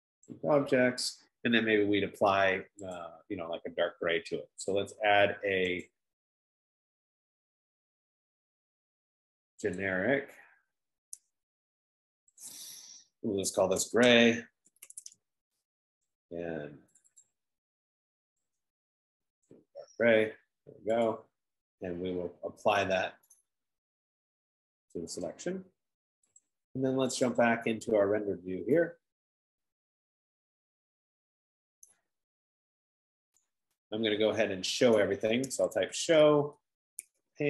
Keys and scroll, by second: 14.4 ctrl+a, 15.3 typing, 35.6-37.4 typing.